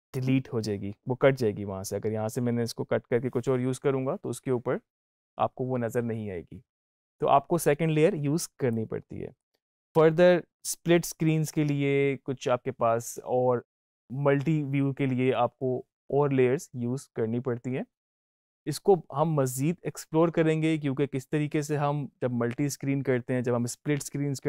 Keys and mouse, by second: 0.0-3.1 drag.